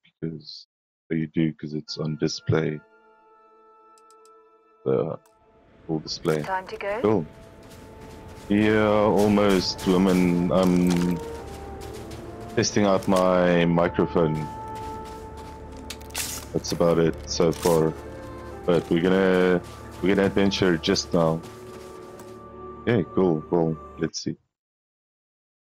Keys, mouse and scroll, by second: 1.7 click, 4.6 click, 6.5-10.7 typing, 10.4 click, 12.8 right click, 14.2 s, 15.7 d, 16.2 w, 25.5 click.